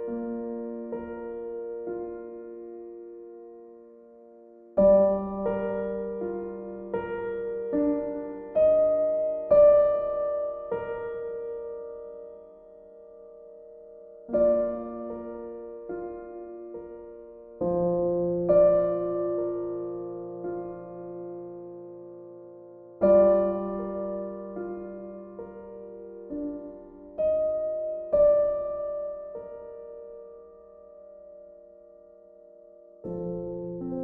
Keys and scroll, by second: 0.0 ctrl+z, 17.1 ctrl+l, 21.9 ctrl+z, 23.8 ctrl+l, 26.6 ctrl+shift+i.